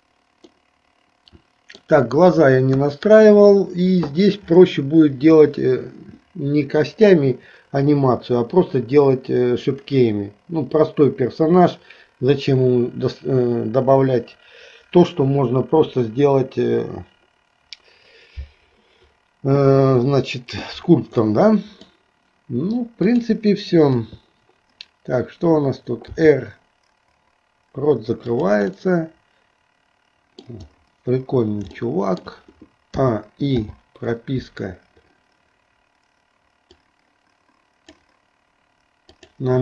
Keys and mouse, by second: 0.6-1.8 middle drag, 2.8 KP_1, 21.4 middle click, 23.1 click, 24.1 KP_3, 26.2 r, 28.9-30.6 middle drag, 32.1 shift+middle click, 33.2 a, 33.8 i, 36.8-38.3 drag.